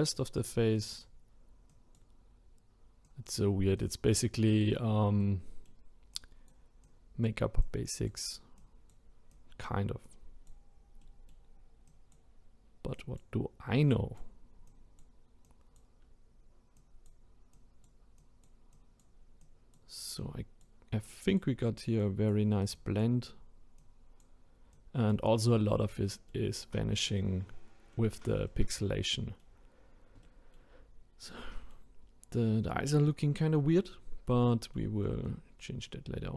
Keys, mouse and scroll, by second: 5.2-6.1 middle drag, 6.1-11.0 drag, 11.0-11.9 middle drag, 11.9-25.6 drag, 25.6-26.1 scroll down 2, 26.1-29.6 middle drag, 29.6-30.2 scroll up 2, 30.2-34.1 middle drag, 34.1-34.5 scroll down 1, 34.5-36.3 middle drag.